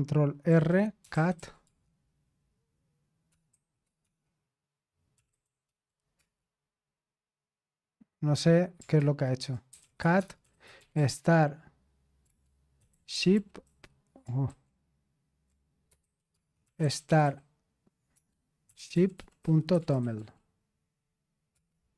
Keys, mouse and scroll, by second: 0.0-6.6 typing, 0.5 ctrl+r, 8.9-21.9 typing.